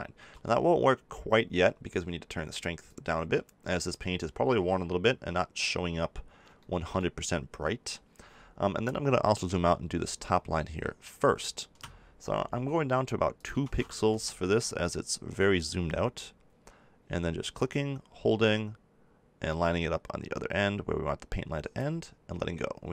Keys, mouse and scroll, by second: 0.2 ctrl+z, 2.9-4.6 drag, 4.7 click, 8.2-9.3 middle drag, 9.3 f, 13.3-15.3 drag, 17.6-19.4 drag.